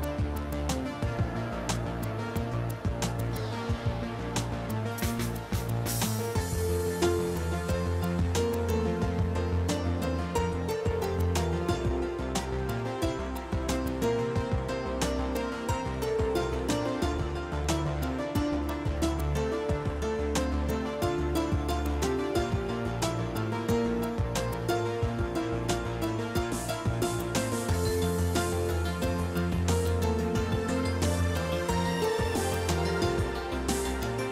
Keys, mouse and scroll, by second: 0.0 click, 0.7 a, 0.9 a, 1.7 u, 2.3 click, 4.3-5.5 drag, 6.1 click, 7.2 click, 8.3 click, 13.7 click, 17.1 click, 18.1 i, 18.2 m, 18.3 g, 19.6-21.8 typing, 22.0 Return, 23.6 click, 26.1 click, 27.3 middle click, 27.7 scroll down 1, 27.9 scroll up 2, 28.5-29.6 middle drag, 31.1 alt+z, 32.2-34.3 middle drag.